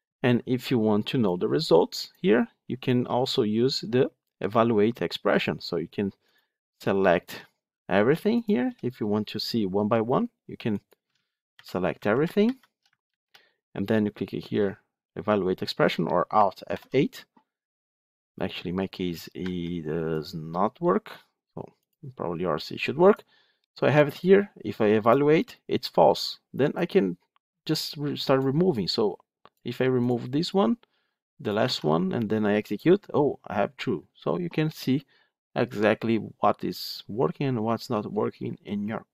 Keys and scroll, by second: 13.0 ctrl+c, 21.9 alt+F8, 31.5 ctrl+x.